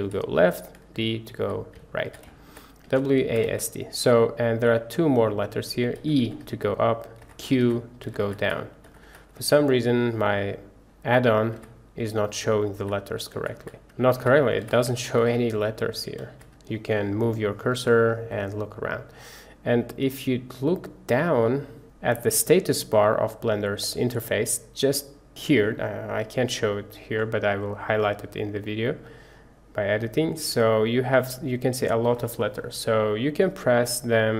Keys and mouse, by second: 4.2-34.3 drag.